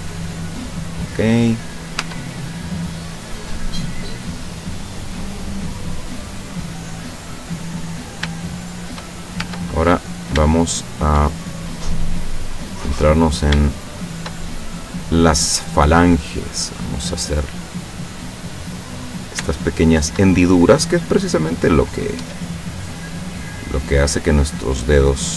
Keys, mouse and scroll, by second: 1.2 middle click, 2.0 Tab, 2.5-4.5 middle drag, 4.5-5.0 scroll down 1, 5.0-7.5 middle drag, 7.5-8.2 scroll up 1, 8.5-9.1 shift+middle drag, 9.4 shift+Tab, 9.8-10.2 scroll up 1, 10.5 shift+middle click, 10.7 shift+scroll up 1, 11.1 shift+middle click, 11.5-12.6 shift+middle drag, 13.3 right click, 13.7 shift+right click, 14.1 shift+right click, 14.5-15.8 shift+middle drag, 16.2-18.0 drag, 18.8 right click, 19.4 shift+right click, 19.8 shift+right click, 20.7-22.2 drag, 22.2 Tab, 22.7-25.3 middle drag.